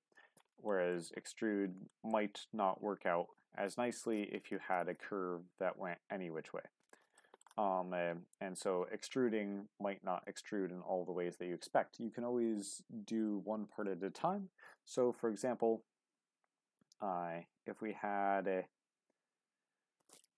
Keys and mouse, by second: 0.7 shift+middle click, 1.9 shift+middle click, 7.2 shift+middle click, 15.0 ctrl+z, 19.2 ctrl+z, 20.2 middle click.